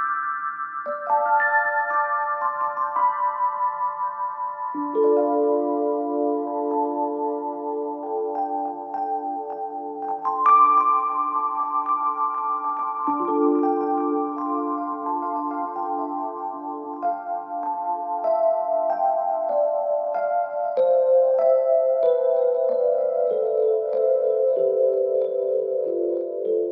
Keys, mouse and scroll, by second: 8.7-11.1 drag, 14.8-17.8 drag, 20.1 click.